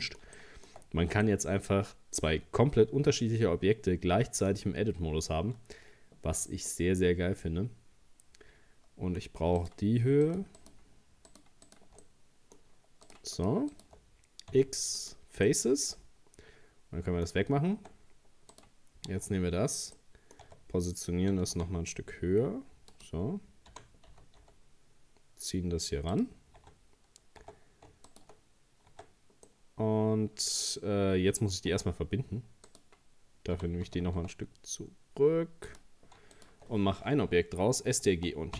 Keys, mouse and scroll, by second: 0.9-1.3 scroll up 1, 1.3-4.3 middle drag, 6.7-9.6 middle drag, 9.6 right click, 10.3 shift+right click, 10.6 shift+right click, 11.3 shift+right click, 11.7 shift+right click, 12.0-13.1 middle drag, 13.1 shift+right click, 13.4 shift+right click, 13.7 shift+right click, 14.5 x, 15.5-17.8 middle drag, 17.8 Tab, 18.2 scroll down 1, 18.5 right click, 19.1 Tab, 20.0 middle click, 20.5 Tab, 21.3 g, 23.7 g, 26.6 Tab, 27.4 Tab, 28.1 shift+right click, 28.6-28.9 scroll up 2, 28.9 Tab, 29.5-31.7 middle drag, 31.7 Tab, 32.0 scroll down 2, 32.7 right click, 33.6 g, 36.4 shift+right click.